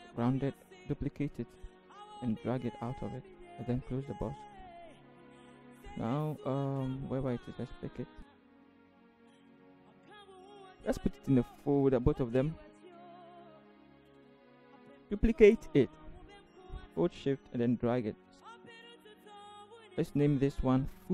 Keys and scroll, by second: 0.4 ctrl+j, 5.4 v, 8.8 ctrl+=, 8.9 ctrl+=, 9.5 Down, 10.0 Right, 12.0 ctrl+g, 13.5-14.5 typing, 13.8 Return, 14.5 Return, 14.8 ctrl+0.